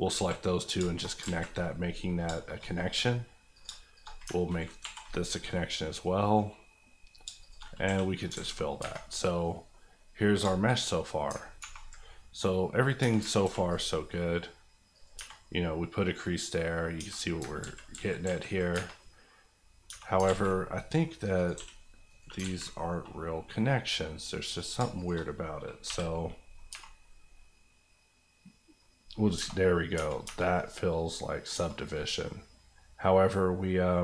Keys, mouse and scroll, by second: 0.1 alt+z, 0.4-1.2 scroll up 4, 0.8 shift+middle click, 1.2 alt+z, 1.5 middle click, 2.3 shift+middle click, 2.6 middle click, 2.7 middle click, 3.5 click, 3.6 shift+click, 4.1 click, 4.2 alt+click, 4.8 alt+m, 5.3 click, 7.2 shift+click, 7.7 click, 7.8 f, 8.3 alt+z, 8.6 scroll down 1, 8.8 Tab, 9.1 middle click, 10.4 shift+middle click, 10.7 shift+scroll down 1, 11.0 middle click, 11.4 ctrl+middle click, 11.6 ctrl+2, 12.0 middle click, 13.0 Tab, 13.4 ctrl+r, 13.6 ctrl+click, 15.1 Tab, 15.4 middle click, 16.9-17.6 scroll up 3, 17.0 Tab, 17.6 ctrl+z, 18.7 Tab, 18.9 middle click, 19.8 Tab, 20.2 alt+z, 20.7 middle click, 21.3 click, 21.5 g, 22.0 right click, 22.4 alt+z, 22.7 middle click, 23.7 middle click, 24.5 click, 24.8 shift+click, 25.2 click, 25.8 j, 26.2 middle click, 26.7 Tab, 27.0-28.9 middle drag, 29.3 Tab, 29.9 middle click, 30.1 Tab, 30.5 middle click, 31.5 Tab, 31.9 middle click, 32.9 scroll down 1.